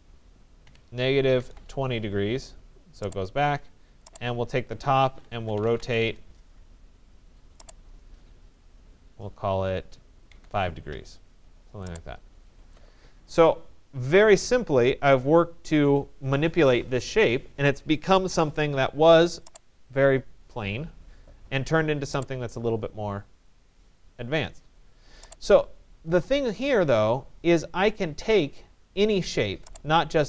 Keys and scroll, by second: 0.7-2.0 typing, 5.6 Return, 9.9 5, 11.0 Return.